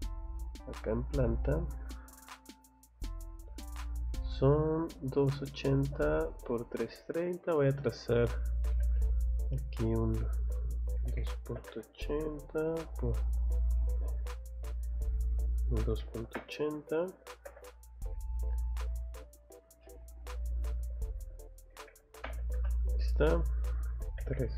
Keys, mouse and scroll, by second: 0.1 click, 0.6 click, 1.6 click, 2.9 click, 3.7 click, 4.0-4.4 scroll up 1, 4.5 scroll down 1, 6.5 scroll down 1, 6.9 middle click, 7.4 scroll up 1, 8.7 l, 9.4 click, 12.2 Tab, 13.9 Escape, 14.5 middle click, 18.6 middle click, 19.6 ctrl+z.